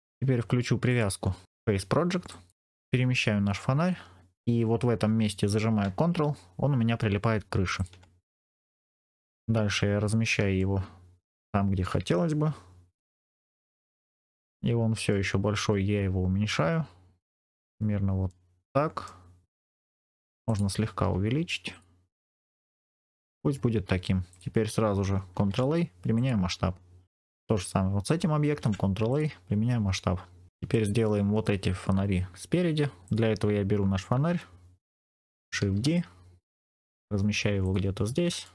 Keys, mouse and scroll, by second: 0.8-2.5 drag, 2.8 g, 7.7 ctrl+click, 8.2-9.2 scroll up 3, 8.8 shift+middle click, 9.6 middle click, 10.5 shift+middle click, 13.1 g, 14.1 ctrl+click, 14.4 middle click, 15.5 s, 17.1 click, 17.6-18.2 scroll down 3, 18.2 middle click, 19.2 scroll down 2, 19.5 click, 19.7 middle click, 20.0-20.3 scroll up 2, 20.3 click, 20.9 s, 21.6 click, 22.3 scroll down 2, 22.4 middle click, 23.5 scroll up 2, 24.2 click, 24.2 scroll up 1, 25.2 ctrl+a, 27.0 click, 28.4 ctrl+a, 29.7-30.5 scroll up 3, 30.5-31.0 scroll down 2, 31.0 middle click, 32.9 click, 35.5 shift+d, 37.5 click, 38.3 shift+middle click.